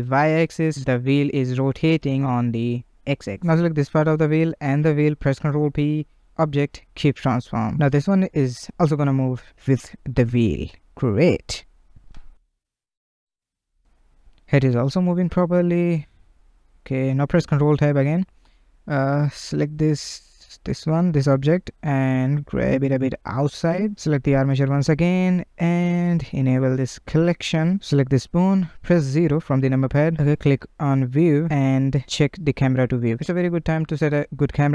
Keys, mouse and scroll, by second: 2.7 click, 3.7 ctrl+Tab, 4.0 click, 5.0 shift+click, 5.2 ctrl+p, 7.8 click, 8.3 ctrl+Tab, 8.6 click, 8.8 g, 11.9 click, 12.7 r, 16.3-17.0 middle drag, 17.2 ctrl+Tab, 17.8-18.2 scroll up 2, 18.2-19.0 shift+middle drag, 19.0 click, 19.9-20.7 middle drag, 20.7 click, 21.2 g, 22.2-22.7 middle drag, 22.7-23.1 scroll down 1, 23.1 click, 24.1 ctrl+Tab, 26.0 click, 27.0 click, 27.4 scroll down 1, 27.7-28.7 middle drag, 28.7 KP_0, 31.1-32.0 drag, 32.6-33.3 middle drag, 33.3-33.6 scroll up 2, 33.6-34.4 shift+middle drag, 34.4-34.7 scroll up 1.